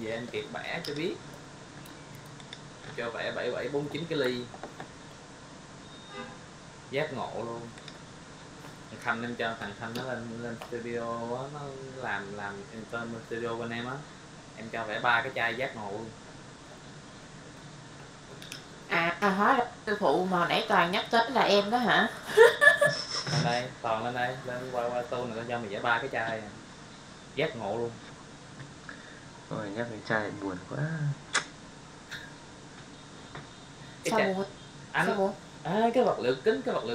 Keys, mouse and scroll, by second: 0.1 middle click, 0.9 click.